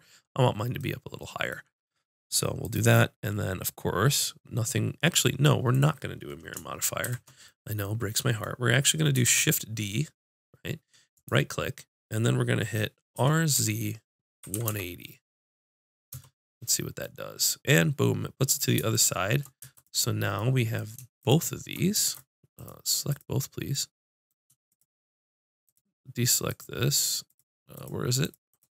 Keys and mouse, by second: 2.6-5.7 drag, 7.0 shift+c, 9.2 shift+d, 13.1 r, 18.7 middle click, 18.9-22.2 drag, 22.2-23.7 right drag, 23.7-28.7 drag.